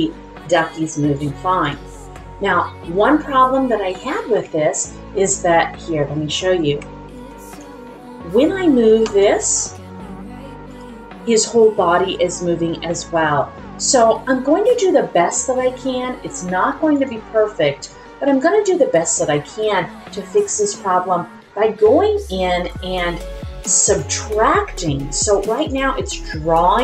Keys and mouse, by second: 1.2 click, 2.4-3.6 middle drag, 4.3 KP_1, 7.1 alt+click, 9.0 r, 10.6 click, 16.9-17.8 drag, 23.8-25.5 drag, 26.0-26.8 drag.